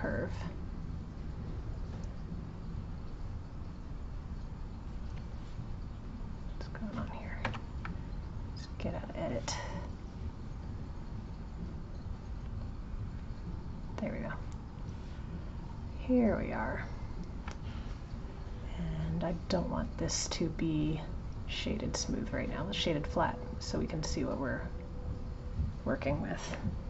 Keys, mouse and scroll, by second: 3.3-5.3 drag, 6.1 click, 7.5 Tab, 8.8 click, 12.5 click, 13.2-16.2 drag, 17.0 click, 20.7-23.7 right drag, 24.1-26.6 right drag, 26.6-26.8 middle drag.